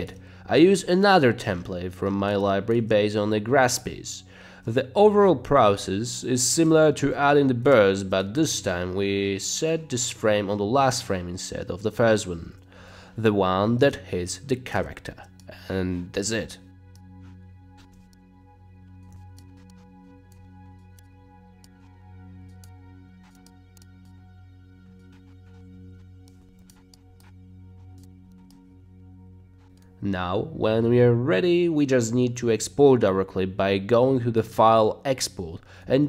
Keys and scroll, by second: 0.1 space, 0.7 space, 2.8 space, 3.5 space, 3.8 space, 4.5 space, 6.7 space, 7.2 space, 7.7 space, 8.0 space, 12.5 BackSpace, 14.7 space, 15.2 space, 18.0 o, 19.1 c, 25.7 Page_Down, 26.1-27.8 typing, 29.5 space.